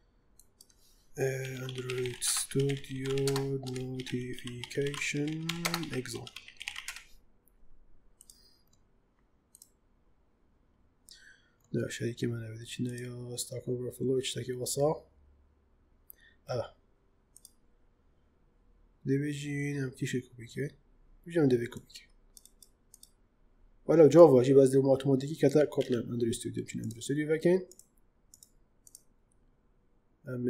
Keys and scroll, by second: 1.3-6.6 typing, 6.8 Return, 25.6 ctrl+c.